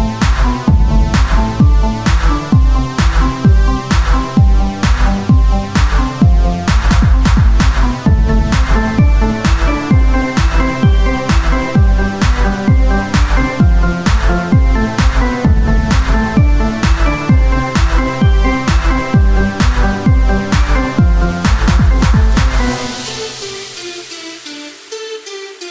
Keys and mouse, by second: 1.3 Tab, 3.8 Tab, 3.8 click, 4.5 ctrl+Tab, 8.2-12.2 drag, 10.1-13.5 right drag, 13.9 ctrl+Tab, 16.2 click, 20.0-21.4 drag, 23.9 Tab, 25.4 Tab.